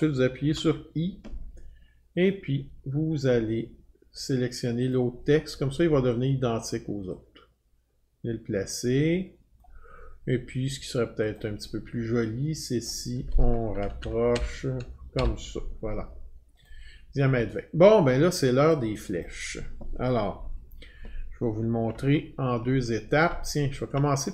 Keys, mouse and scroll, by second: 0.4 i, 2.3 click, 4.9 click, 9.6 click, 11.4 click, 12.9 click, 13.8 Left, 14.0 Left, 14.3 Left, 15.2 Right, 16.6 click, 18.7 click, 19.2 click, 22.2-22.9 alt+scroll, 24.1 alt+scroll.